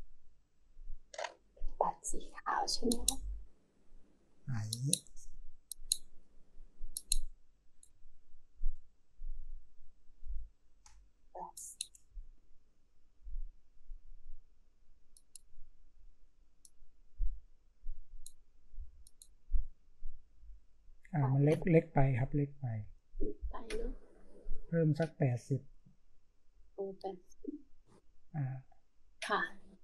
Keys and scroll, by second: 2.9-3.6 typing, 7.9-8.7 space, 10.2-10.8 space.